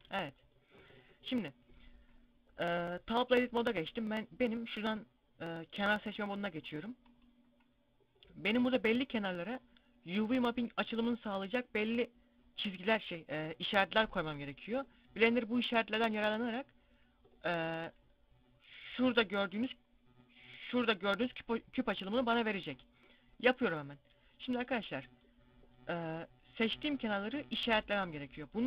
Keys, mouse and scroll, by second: 0.8 middle click, 4.4 click, 6.0 right click, 24.5 middle click, 26.4 right click.